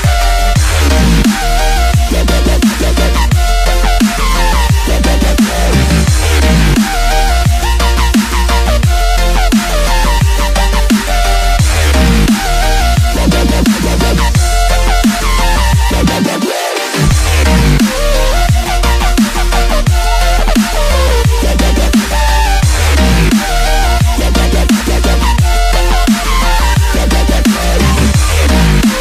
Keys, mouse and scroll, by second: 1.7-8.8 drag, 14.4 click, 21.1 click, 21.6-25.3 middle drag.